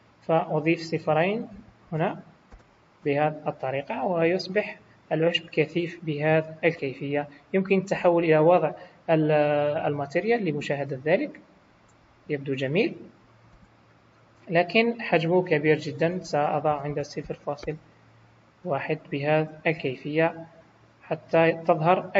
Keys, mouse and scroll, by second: 1.8 KP_0, 3.8 middle click, 10.1 click, 10.7 middle click, 13.5 KP_1, 14.4-14.7 scroll up 3, 15.9 click, 19.1 scroll down 3, 19.5 middle click.